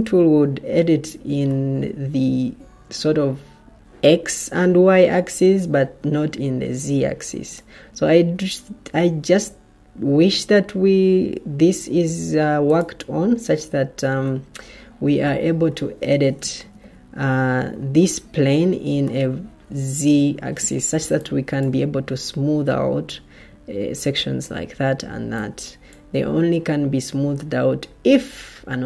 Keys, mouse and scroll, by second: 0.0 ctrl+z, 16.5 ctrl+z, 20.9 ctrl+z.